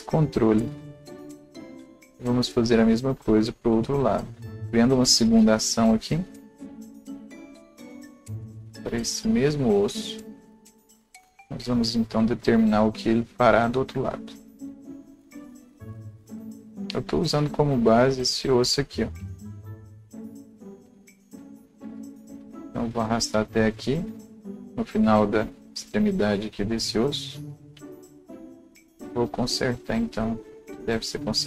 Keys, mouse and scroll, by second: 15.2-16.3 drag, 15.3 alt+right click, 16.3-16.6 scroll up 1, 16.6-25.6 drag, 25.8-31.4 drag.